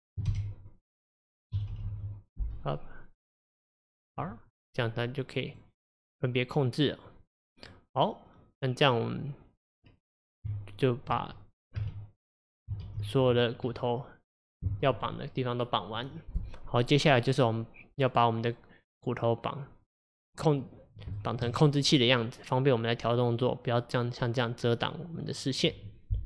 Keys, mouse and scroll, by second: 1.8 Delete, 1.9 Delete, 5.5 click, 6.2 click, 10.5 Tab, 11.8 a, 12.9 alt+r, 13.4 scroll down 2, 13.7-16.8 middle drag, 16.8-19.9 middle drag, 21.2-24.8 shift+middle drag.